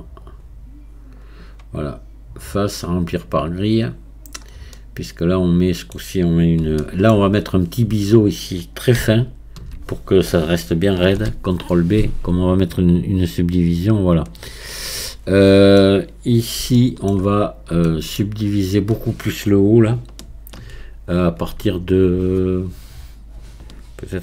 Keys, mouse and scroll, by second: 0.3-4.2 drag, 4.2 scroll down 1, 4.7-6.4 middle drag, 6.4-6.8 scroll up 2, 6.8 shift+middle click, 7.4-9.2 scroll up 1, 9.2-11.1 alt+drag, 11.1 ctrl+b, 14.7-15.1 scroll down 1, 15.1-17.4 middle drag, 17.4-17.9 scroll up 2, 17.9-21.0 shift+middle drag.